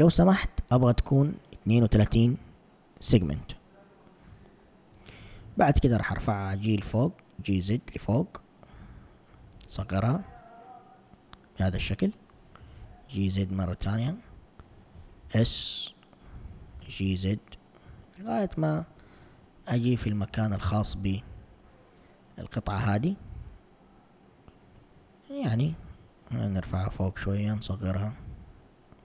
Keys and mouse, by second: 4.3 click, 5.7 g, 9.8 s, 12.6 g, 15.3 s, 16.8 g.